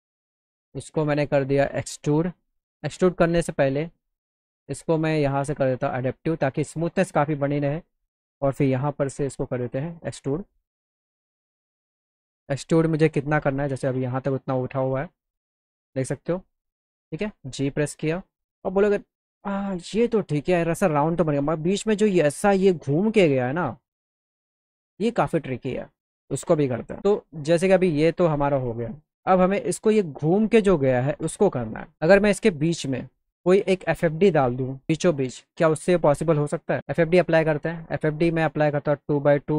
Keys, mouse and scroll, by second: 1.2 click, 2.3 click, 3.4 click, 4.6 click, 5.7 click, 6.9-7.6 scroll down 1, 7.7 click, 8.6 e, 9.6 click, 12.0 click, 12.9 click, 14.9-16.3 alt+middle drag, 17.2 g, 17.8 alt+middle click, 28.9 click, 34.4 f, 35.9 click.